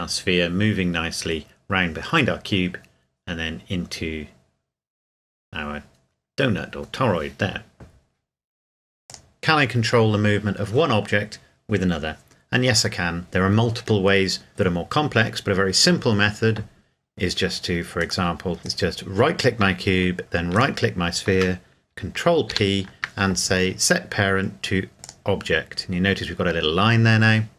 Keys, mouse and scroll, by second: 9.1 click, 18.0 click, 18.6 shift+right click, 18.7 right click, 22.5 ctrl+p, 25.0 click.